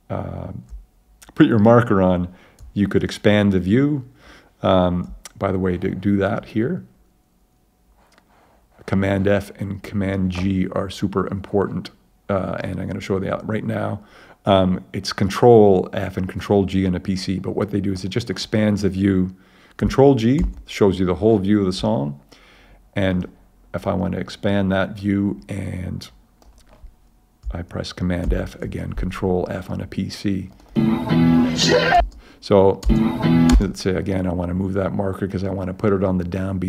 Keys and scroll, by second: 20.4 super+g, 28.2 super+f, 32.0 space.